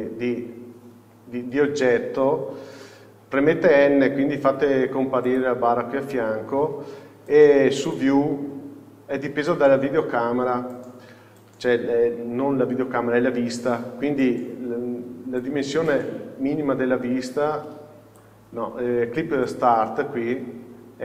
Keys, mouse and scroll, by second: 1.0-3.7 scroll down 1, 3.7 n, 5.4-8.1 drag, 15.5-21.0 drag.